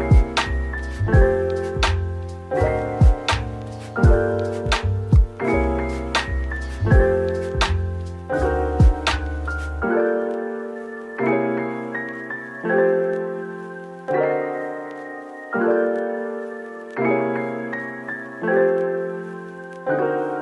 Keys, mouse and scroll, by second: 1.8-2.8 typing, 4.5-6.4 typing, 7.4 double click, 8.4-10.4 typing, 11.5-11.8 scroll down 1, 12.0 middle click, 16.1 typing, 19.2 middle click.